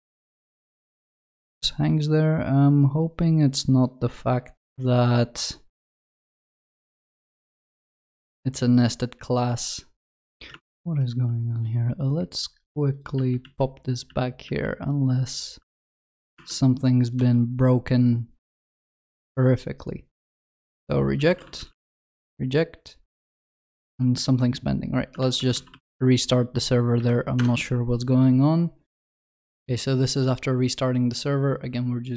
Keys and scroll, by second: 13.2 ctrl+z, 24.3 alt+F12.